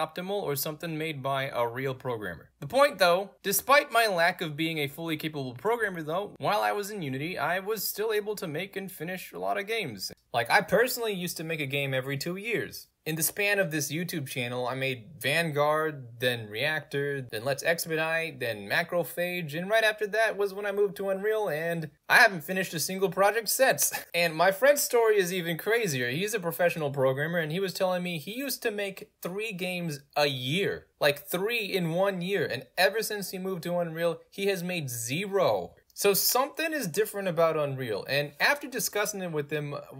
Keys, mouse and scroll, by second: 3.3 d, 3.9 a, 4.8 a, 6.4 space, 8.8 a, 9.3 space, 10.1 middle click, 15.1 click.